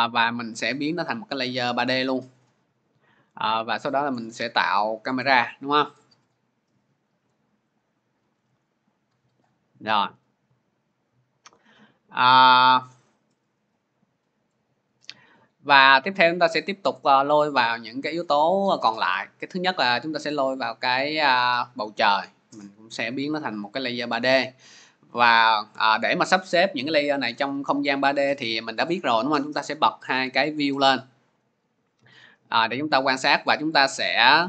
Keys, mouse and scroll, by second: 1.8 click, 3.7 click, 5.6 click, 6.6 click, 7.6 click, 8.5 click, 19.6 click, 21.6 click, 23.4 click, 29.4 click, 30.1 click, 32.7-33.3 scroll, 33.3-34.4 scroll.